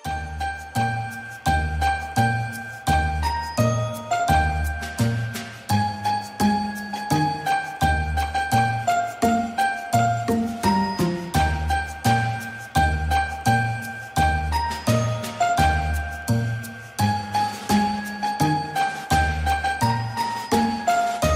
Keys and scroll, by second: 1.1 ctrl+g, 4.9 ctrl+shift+].